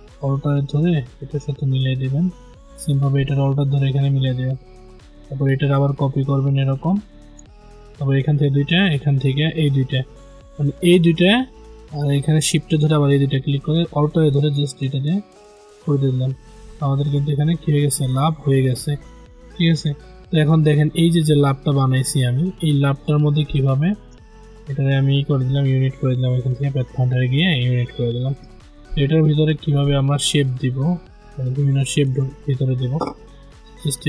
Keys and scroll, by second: 25.4 ctrl+z.